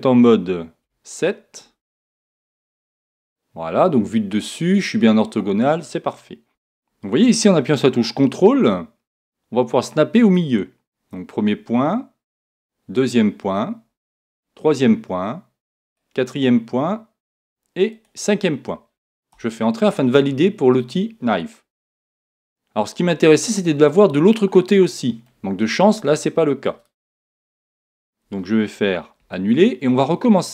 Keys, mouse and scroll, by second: 3.0 KP_1, 6.5 k, 20.9-22.9 middle drag, 23.8-27.8 middle drag, 27.3 KP_1, 29.2 super+z.